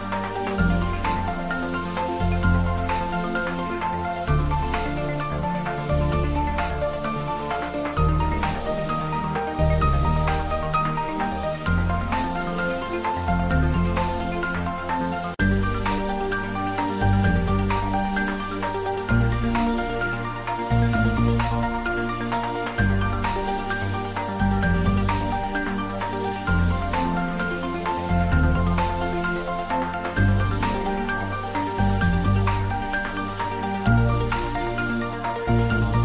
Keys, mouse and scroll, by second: 0.6 shift+right click, 0.8 shift+a, 7.6 click, 8.0 s, 8.6 click, 8.9 s, 9.5 click, 9.6 s, 10.7 click, 10.9 s, 11.4 click, 11.7 s, 12.5 click, 12.8 middle click, 13.5 click, 13.7 ctrl+middle click, 14.2 shift+middle click, 15.1 g, 16.1 click, 16.4 ctrl+s, 17.2 click, 17.9 s, 19.4 click, 19.9 s, 20.8 click, 21.0 ctrl+middle click, 21.4 Tab, 21.6 middle click, 22.7 3, 22.9 click, 23.2 middle click, 23.6 shift+click, 23.9 middle click, 24.6 middle click, 27.0 click, 28.1 s, 28.9 click, 30.2 g, 33.3 click, 33.4 Tab, 33.7 middle click, 34.5 Tab, 34.8-36.0 middle drag.